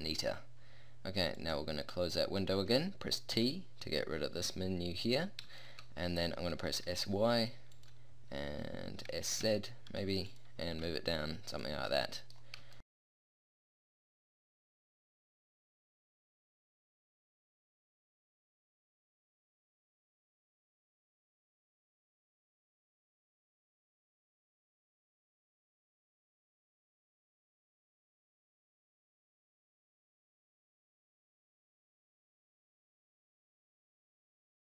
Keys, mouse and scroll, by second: 3.0 click, 3.3 t, 5.3-5.7 middle drag, 6.7 s, 9.1 s, 10.7 g, 11.9 middle drag, 12.2 middle drag, 13.1 r, 13.9 shift+d, 14.1 g, 14.3 r, 15.1-15.6 drag, 15.5 shift+d, 15.6 g, 15.9 r, 16.1 click, 16.5 a, 16.9-17.4 middle drag, 17.4 click, 17.5-20.4 typing, 18.7-19.1 drag, 20.0 click, 21.5-23.1 typing, 23.3-23.7 drag, 24.1 click, 24.1-30.1 typing, 28.1 click, 31.9-34.1 typing, 32.9 click.